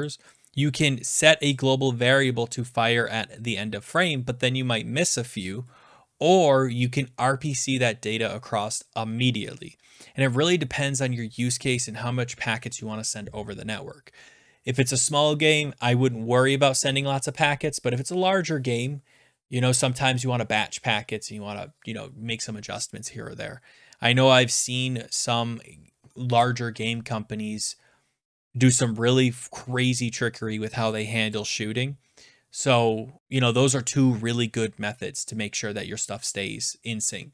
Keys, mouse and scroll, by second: 0.0 click, 0.3 click, 1.5 click, 5.9-6.7 scroll down 10.